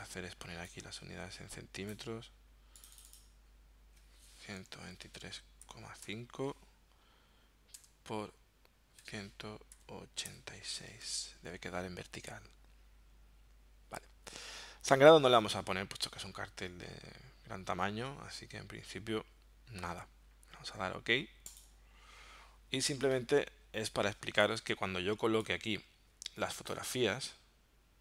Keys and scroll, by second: 4.6-6.1 typing, 7.8 Tab, 9.0 1, 9.8 8, 10.4 6, 11.0 Tab.